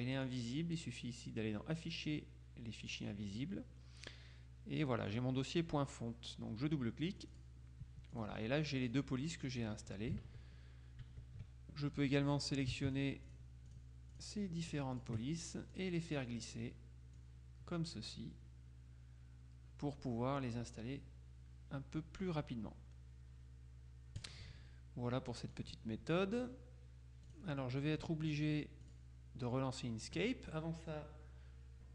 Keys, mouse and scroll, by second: 0.3 click, 3.0 click, 5.2 click, 7.3 click, 8.2 click, 9.1 click, 9.7 click, 10.3 alt+Tab, 11.1 Tab, 12.5-15.5 drag, 15.8-16.8 drag, 17.3-18.7 drag, 24.3 click, 25.7 click, 26.5 click, 27.4 click, 29.0 click.